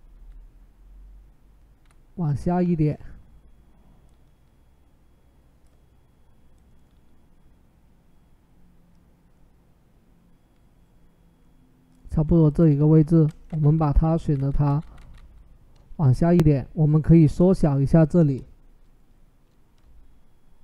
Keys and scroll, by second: 1.6 Down, 13.3 Down, 13.4-14.9 typing, 15.9 ctrl+t.